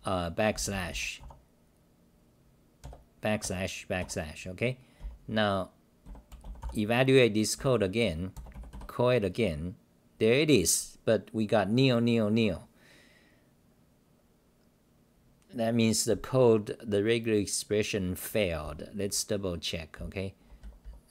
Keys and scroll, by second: 0.5 h, 1.2 u, 4.0 Home, 5.0-7.8 typing, 19.9-21.1 typing.